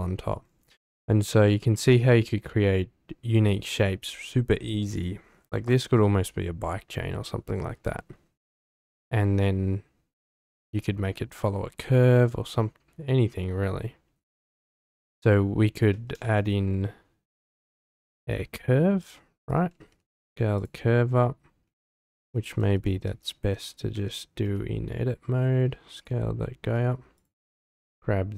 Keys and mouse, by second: 1.0 shift+middle drag, 1.4 middle drag, 15.9 click, 16.2 shift+a, 20.0 s, 21.9 Tab, 22.7 ctrl+z, 23.1 ctrl+z, 23.9 Tab, 24.4 s, 25.9 click, 26.6 Tab, 27.2 click.